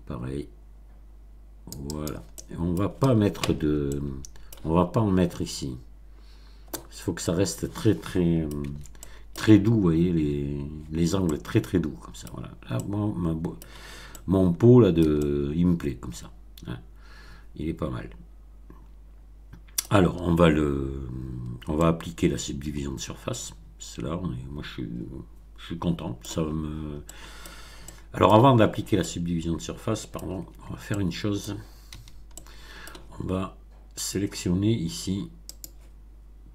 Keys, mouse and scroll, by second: 1.9 click, 2.3 middle click, 3.5 scroll up 1, 3.8-4.7 middle drag, 6.8-7.1 scroll down 2, 7.2-8.6 middle drag, 8.6 Tab, 8.9-9.4 middle drag, 11.2-12.3 middle drag, 12.3-12.6 scroll down 1, 12.7-13.7 middle drag, 14.0-20.0 shift+middle drag, 21.7-26.4 middle drag, 27.0-27.6 middle drag, 27.8 shift+middle click, 28.6-28.9 shift+scroll up 1, 28.9-30.3 middle drag, 30.4 Tab, 30.8-31.6 middle drag, 31.8 a, 32.3 middle click, 35.4 click.